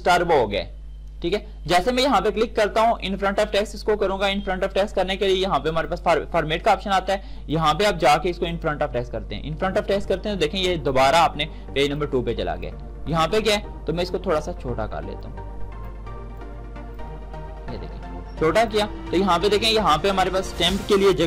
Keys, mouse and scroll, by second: 5.7 click, 10.9-18.7 drag.